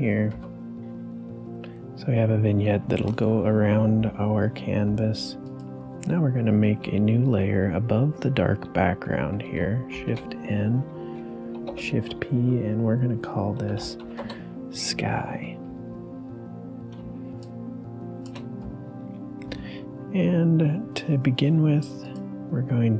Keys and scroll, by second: 0.3 ctrl+d, 9.5 ctrl+d, 9.9 shift+n, 11.6 shift+p, 13.7 s, 14.1 Return, 16.9 space.